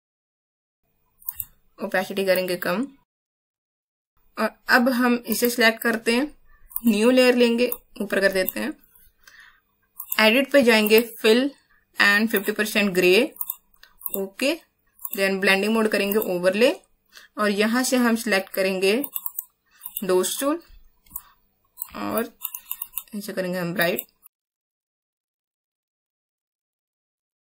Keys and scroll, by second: 0.2 ctrl+z, 25.2 space, 26.4 ctrl+alt+space, 27.0 ctrl+z.